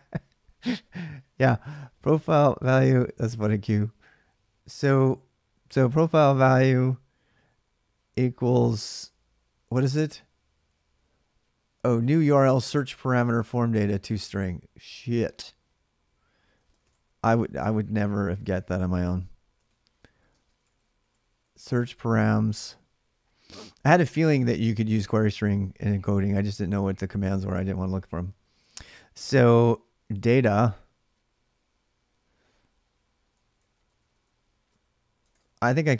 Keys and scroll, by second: 2.3 typing, 16.2-22.7 typing, 23.9-25.2 typing, 29.7-30.7 typing, 33.4 ctrl+[, 33.5-35.9 typing.